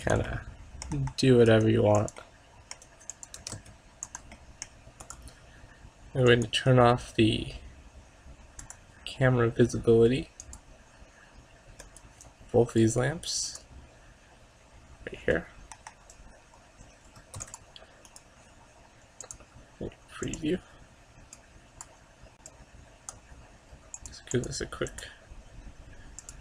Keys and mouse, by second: 1.0 KP_0, 1.6 g, 3.0 g, 3.5 r, 4.4 click, 4.6 click, 5.1-7.0 right drag, 6.4-8.2 drag, 8.2 middle click, 8.7-12.2 drag, 11.9 right click, 12.4-13.6 right drag, 13.9-15.4 drag, 15.5 middle click, 15.8 KP_0, 17.5 ctrl+s, 25.7 click.